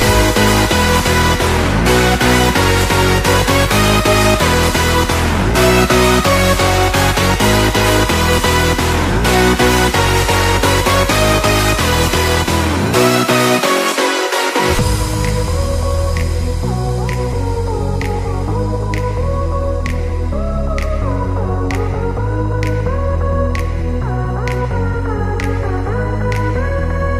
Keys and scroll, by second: 1.8 space, 4.2 ctrl+z, 6.9 space, 7.9 ctrl+=, 10.7 space, 13.4 ctrl+-, 14.6 ctrl+=, 15.1 space, 17.0 ctrl+=, 25.6 space.